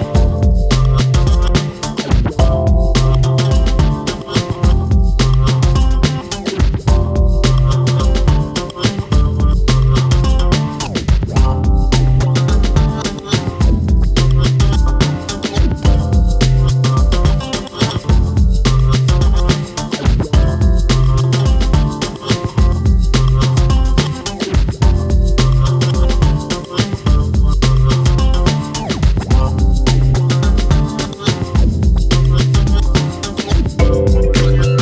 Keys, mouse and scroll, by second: 0.0 scroll down 1, 0.1 middle click, 0.5-0.9 scroll up 3, 0.9 click, 1.3 middle click, 1.8 click, 2.7 middle click, 3.3-3.6 scroll up 2, 3.6 click, 4.6 KP_1, 5.5 ctrl+right click, 6.0 r, 6.7 scroll down 1, 6.8 middle click, 7.7 click, 8.1 middle click, 8.7 click, 9.3 scroll down 2, 9.5 click, 10.5 Tab, 10.7 click, 11.3 click, 12.2 click, 12.4-13.1 scroll down 2, 12.7 KP_7, 13.1-13.5 shift+middle drag, 13.5 click, 14.2 shift+d, 15.4 drag, 17.0-17.7 scroll up 1, 17.7 ctrl+z, 18.0 ctrl+z, 19.0 click, 19.5 Tab, 20.2 `, 20.8 Tab, 21.0 click, 21.3 click, 21.8 `, 23.1 Tab, 23.6 a, 24.0 shift+d, 25.0 click, 28.0 ., 31.4-31.7 scroll up 3, 31.7 shift+middle click, 32.2 shift+middle click, 32.4 alt+/, 32.8 click, 33.1 shift+middle click, 33.4 g.